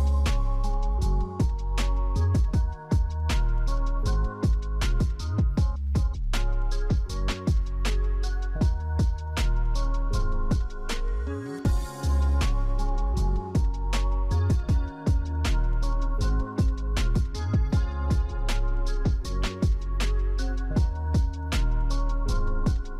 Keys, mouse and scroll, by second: 4.0-4.8 scroll up 3, 8.6 scroll down 2, 10.6-12.1 scroll down 1, 21.6 right click, 22.4 right click.